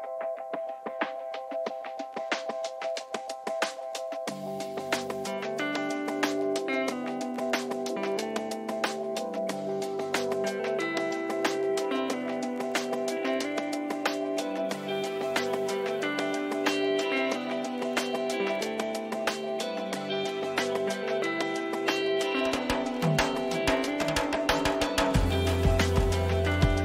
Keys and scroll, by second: 3.2 Return, 3.7 ctrl++, 8.2 ctrl+-, 9.1 e, 12.4 Caps_Lock, 13.9 ctrl+z, 19.5 ctrl+t.